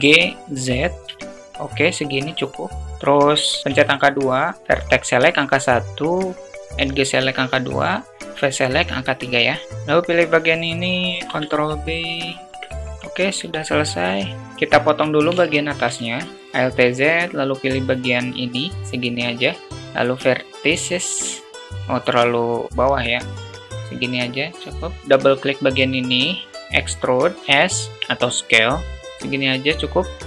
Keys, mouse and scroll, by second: 2.7 2, 9.4 click, 10.8 ctrl+b, 12.4 alt+Tab, 12.6 middle click, 13.8 `, 14.3 Tab, 15.0 alt+shift+middle click, 15.4 alt+z, 16.2 click, 19.7 x, 22.6 ctrl+z, 23.1 click, 23.3 x, 24.9 middle click, 25.0 alt+z, 26.5 e, 30.0 e.